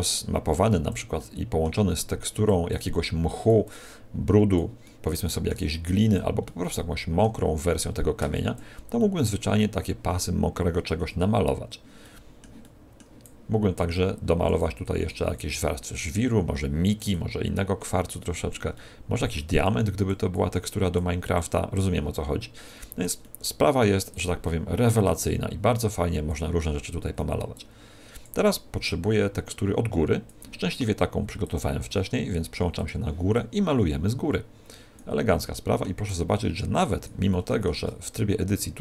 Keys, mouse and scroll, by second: 1.1 middle click, 2.7 click, 4.7 middle click, 6.4 middle click, 7.5 click, 8.9 middle click, 11.9 middle click, 12.5 middle click, 13.1 click, 14.8 click, 17.4 click, 18.8 middle click, 19.6 click, 20.4 click, 23.3 middle click, 24.1 click, 26.5 middle click, 27.5 click, 28.8 click, 31.3 click, 33.3 click, 35.5 middle click, 36.0 click, 37.3 middle click, 37.8 Tab.